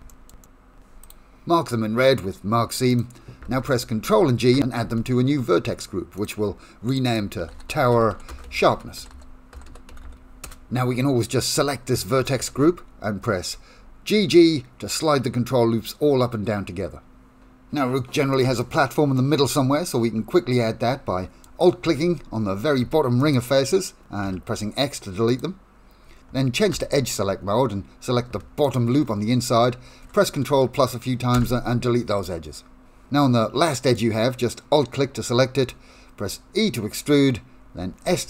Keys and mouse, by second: 0.1 shift+middle click, 0.4 middle click, 4.0 ctrl+g, 7.1-11.2 drag, 10.0 s, 12.4 g, 19.2-21.4 middle drag, 22.0 3, 24.2 x, 26.8 2, 28.7 alt+click, 31.4 ctrl+KP_Add, 31.8 middle click, 32.1 x, 33.3 middle click, 34.0-35.3 middle drag, 36.7 middle click, 38.0 e.